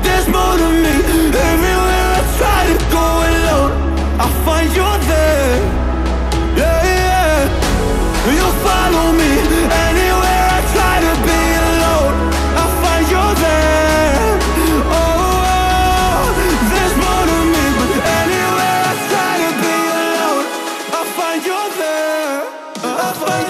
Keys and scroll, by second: 0.6 5, 2.4 shift+5, 19.4-22.3 typing.